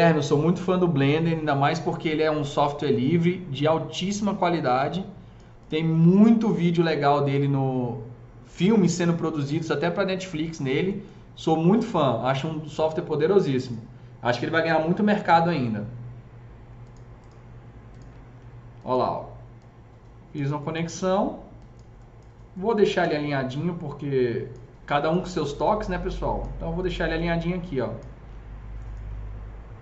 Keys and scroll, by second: 15.1 KP_0, 23.0 s.